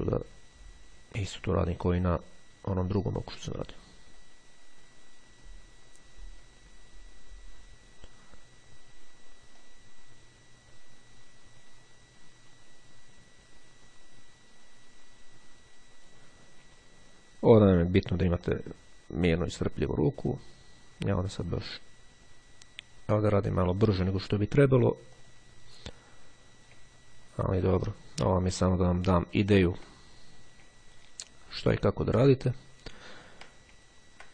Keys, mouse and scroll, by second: 0.3-8.5 drag, 8.5-9.1 scroll down 1, 9.8-16.7 drag, 16.8 x, 18.5-24.7 drag, 25.3 click, 26.1-26.6 scroll up 1, 26.6-28.3 scroll down 2, 29.1-30.2 scroll up 2, 31.1-32.5 ctrl+scroll down 2, 32.8-33.7 scroll down 2, 34.0-34.3 ctrl+scroll down 3.